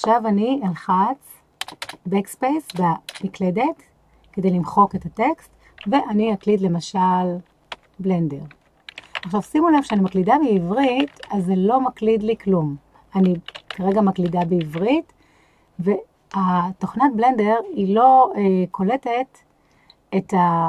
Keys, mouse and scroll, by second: 1.6 BackSpace, 1.9 BackSpace, 2.7 BackSpace, 3.1 BackSpace, 7.7-9.2 typing, 10.8 k, 10.8 j, 11.1 f, 13.7 k, 13.8 j, 13.8 g.